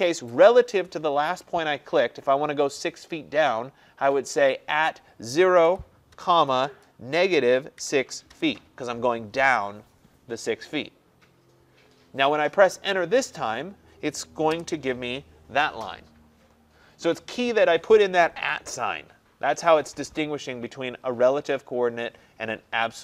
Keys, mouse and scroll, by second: 5.7-6.2 typing, 7.2-8.3 typing, 14.5 Return.